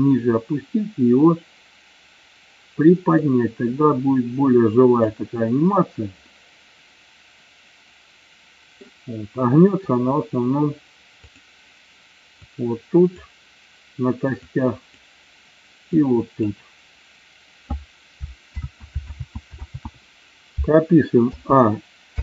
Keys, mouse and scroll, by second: 0.1-2.0 drag, 3.2-5.1 drag, 6.2-8.9 middle drag, 11.4 click, 12.5 click, 14.5 click, 16.1 click, 18.6 ctrl+z, 19.1 ctrl+z, 19.6 ctrl+z, 21.3 a.